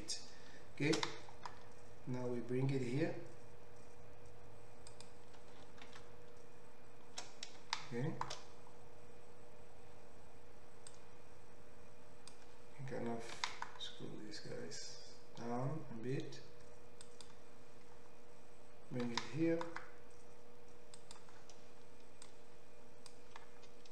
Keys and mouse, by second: 1.2 shift+d, 5.0-10.9 middle drag, 6.4 shift+r, 10.9-17.3 drag, 13.3 s, 17.3-22.3 middle drag, 19.0 g, 22.3-23.9 drag.